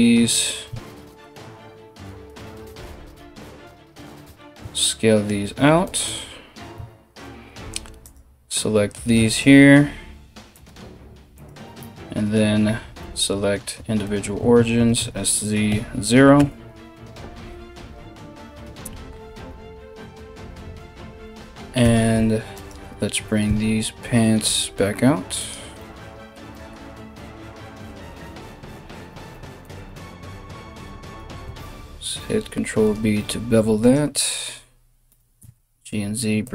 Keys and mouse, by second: 0.2 3, 0.7 alt+right click, 1.9 right click, 2.4 alt+s, 6.3 3, 7.6 right click, 8.9 right click, 10.1 alt+shift+right click, 10.9 alt+shift+right click, 14.3 s, 21.4 2, 22.1 right click, 22.4-36.5 middle drag, 23.1 s, 26.7 KP_1, 28.9 s, 30.6 alt+right click, 31.3 ctrl+b, 33.4 alt+right click, 34.6 g.